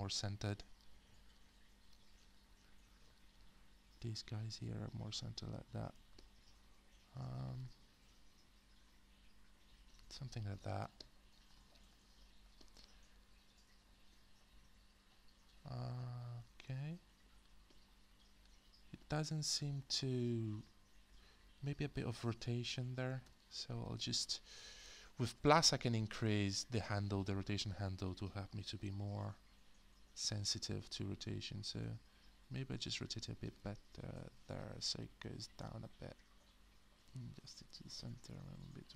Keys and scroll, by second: 23.2 alt+e, 25.3-26.0 typing.